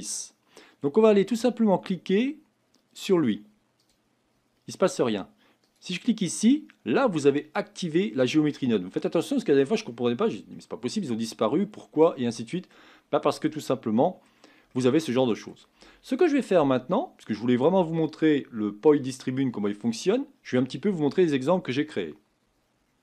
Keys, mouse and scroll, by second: 5.8-13.3 drag, 13.3-22.7 middle drag, 22.9 middle click.